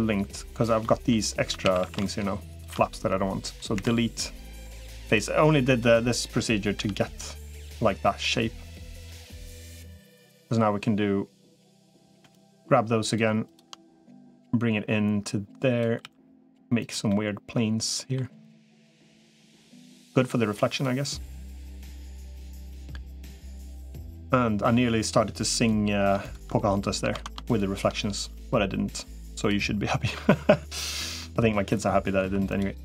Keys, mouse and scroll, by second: 0.7 middle click, 1.2 3, 1.4 a, 1.6 a, 3.6 Delete, 6.6 l, 7.5 middle click, 8.6-9.6 drag, 11.6 click, 14.2-15.8 drag, 15.8 s, 16.9-18.0 middle drag, 18.6 click, 19.8-20.8 drag, 21.6 middle click, 22.5-23.6 middle drag, 23.9 middle click, 25.4 click, 26.0 shift+click, 27.0 ctrl+z, 28.2-29.4 drag, 31.0 middle click, 32.4 2.